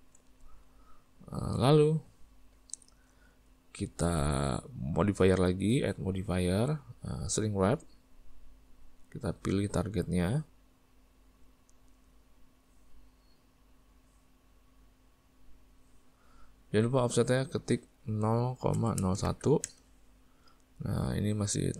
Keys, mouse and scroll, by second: 0.5 Tab, 0.9-8.2 middle drag, 8.2-10.4 drag, 12.6-14.2 middle drag, 14.2 click, 19.7 click, 20.4-21.7 middle drag.